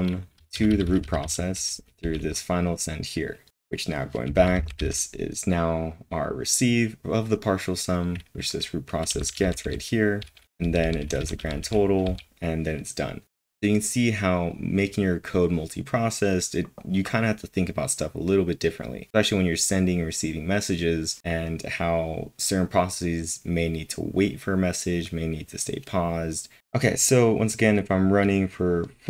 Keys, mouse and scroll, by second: 1.0-2.0 typing, 3.4-4.2 typing, 10.6-12.5 typing, 26.6 typing.